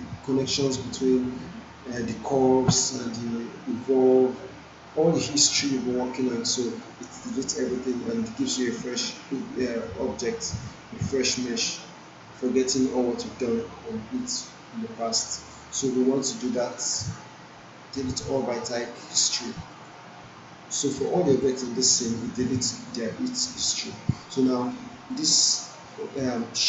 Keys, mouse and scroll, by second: 1.9 click, 16.5 click, 19.7 click, 21.0 alt+middle click, 21.7 alt+right click, 22.1 alt+middle click, 24.1 click, 26.3-26.6 alt+drag.